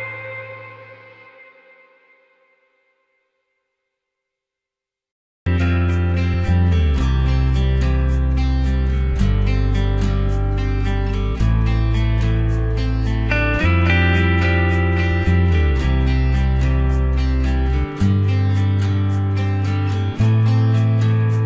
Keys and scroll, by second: 13.3 ctrl+t.